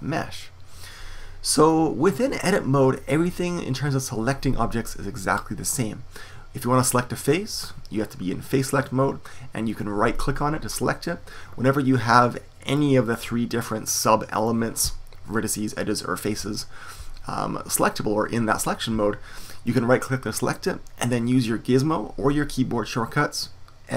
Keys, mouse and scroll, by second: 1.8-9.7 middle drag, 9.7-12.7 right drag, 12.7-15.9 drag, 19.6-23.9 right drag.